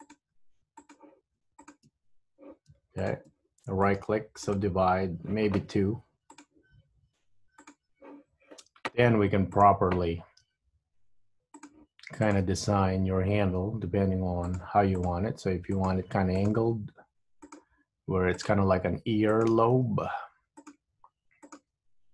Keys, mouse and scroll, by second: 0.1 click, 0.4 g, 1.7 shift+click, 3.1 click, 3.9 right click, 6.4 click, 7.7 click, 9.7 click, 10.5 g, 12.4 click, 12.5 g, 15.0 click, 15.4 g, 16.4 click, 16.7 g, 18.6 click, 19.4 click, 19.8 g, 21.5 click, 21.7 g.